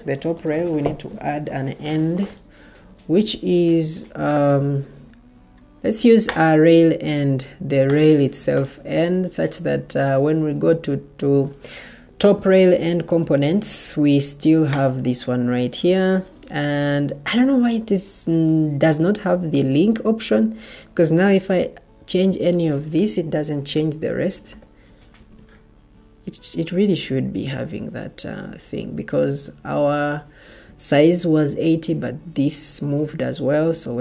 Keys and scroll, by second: 24.1-24.9 typing.